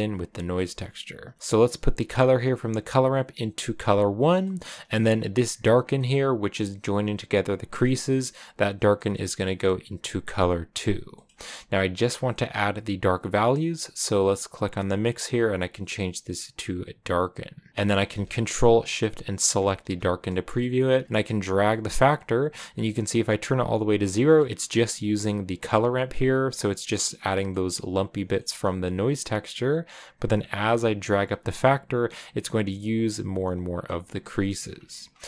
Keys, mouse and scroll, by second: 4.1-5.9 scroll down 2, 5.4 click, 6.9-17.7 drag, 17.7-18.9 scroll down 2, 19.4 ctrl+shift+click, 20.9-23.9 drag, 23.9 middle click, 24.8-26.6 drag, 26.6-28.7 middle drag, 28.7 click, 30.5-33.1 drag, 33.6 scroll down 2, 33.7-35.2 middle drag.